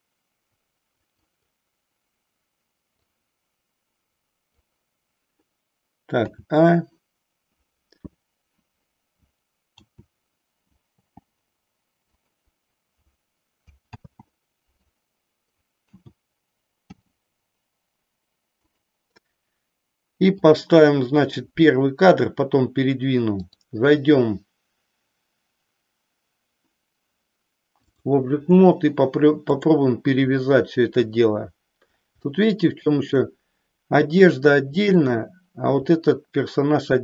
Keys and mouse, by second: 0.0-1.1 drag, 1.4 click, 3.0-4.4 drag, 6.2 a, 9.8 a, 11.0 g, 12.2 click, 13.8 ctrl+z, 15.8 a, 16.8 g, 18.7 click, 20.4 click, 23.3-28.1 drag, 29.4 click, 32.3 shift+middle click.